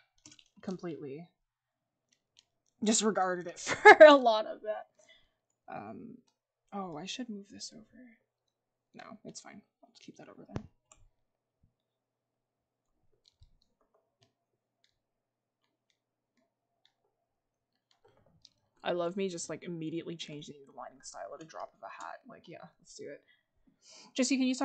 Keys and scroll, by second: 13.8 ctrl+z.